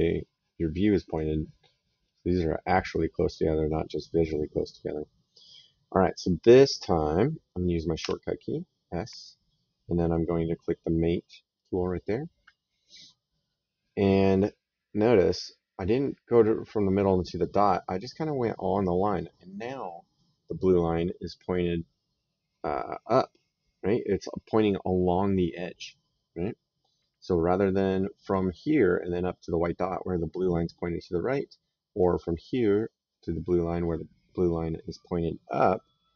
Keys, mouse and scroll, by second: 2.8 right click, 6.0 click, 7.8 s, 11.4 click.